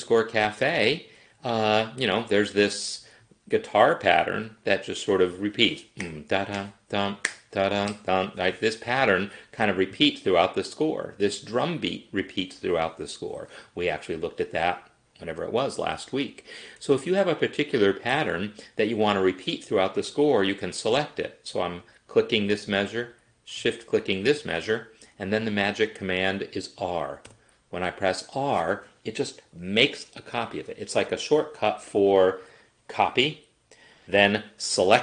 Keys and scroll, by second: 27.3 r.